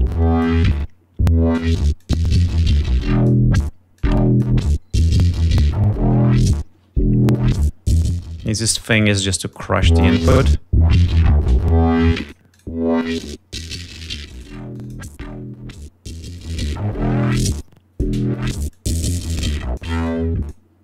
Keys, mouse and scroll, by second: 2.4-3.9 drag, 4.4 click, 5.3 click, 8.1-9.3 drag, 9.7 click, 12.3 click, 12.6 click, 13.3 click, 13.6 click, 14.0 click, 14.4 click, 14.8 click, 15.2 click, 16.7-18.5 drag, 19.0-20.2 drag, 20.3 click.